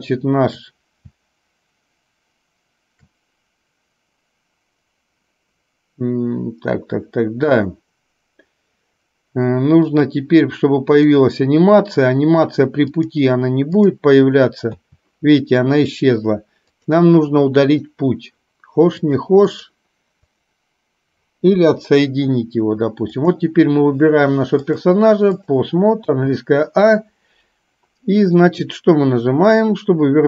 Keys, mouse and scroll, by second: 9.9 click, 11.1 click, 13.0-14.0 drag, 14.8 a, 16.8 click, 17.8 click, 19.1 click, 20.3 click, 21.6 Delete, 24.9 click, 26.1 a, 29.6-30.2 drag.